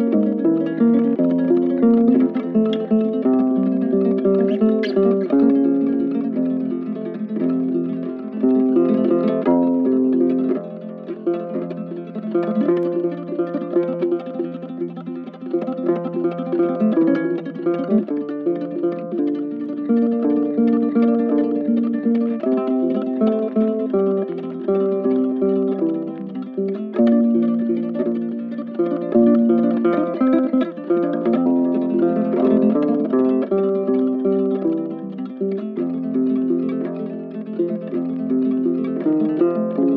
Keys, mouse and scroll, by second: 1.6 ctrl+click, 2.5 ctrl+z, 2.9 ctrl+i, 16.4 ctrl+z, 20.3 ctrl+click, 31.1 ctrl+z, 31.6 right click, 33.8 ctrl+z, 33.9 ctrl+z, 39.7 right click.